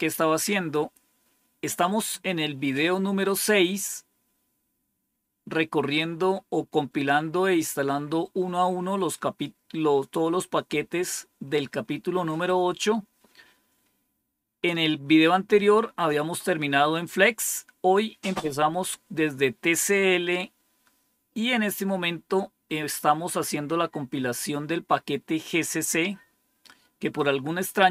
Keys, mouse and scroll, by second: 3.1 scroll down 3, 4.0-4.6 scroll down 5, 5.1 scroll down 3, 5.8 scroll down 2, 6.5 scroll down 2, 7.6 scroll down 3, 8.3 scroll down 2, 8.9 scroll down 2, 12.3 scroll down 2, 20.2-20.6 scroll down 3.